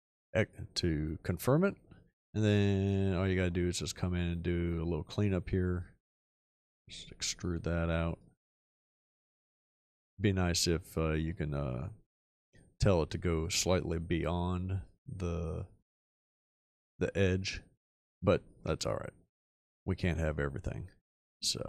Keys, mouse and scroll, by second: 6.7 e.